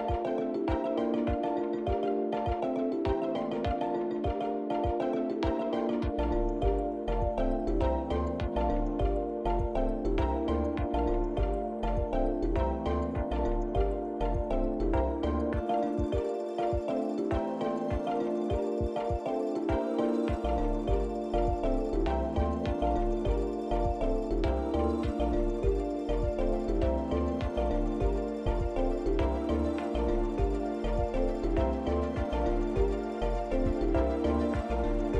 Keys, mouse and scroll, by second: 0.3 shift+click, 1.3 shift+click, 2.0 middle click, 3.7 shift+click, 4.8 shift+click, 5.4 middle click, 7.6 shift+click, 9.1 ctrl+l, 12.9 click, 13.7 middle click, 15.2 click, 16.7 click, 25.1 click, 26.3 click.